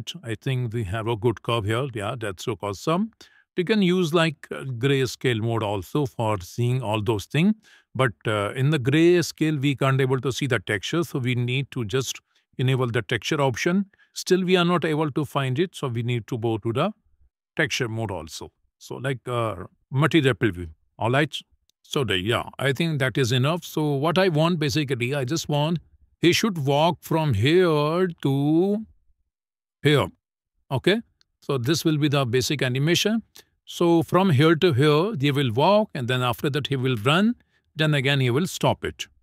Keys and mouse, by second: 0.2 middle click, 1.4 Escape, 1.5 Escape, 1.9 `, 3.8 click, 6.5 shift+middle click, 11.2-13.1 drag, 15.7 click, 17.8 e, 18.2 y, 19.1 x, 21.4 shift+middle click, 23.1 click, 24.4 Tab, 25.0 shift+middle click, 25.4 middle click, 27.6 shift+middle click, 28.0-29.6 middle drag, 30.1 middle click, 31.0 shift+middle click, 31.4 middle click, 31.9 shift+middle click, 32.2 middle click, 33.2 shift+middle click, 34.6 shift+middle click, 35.1 middle click, 35.9 shift+middle click.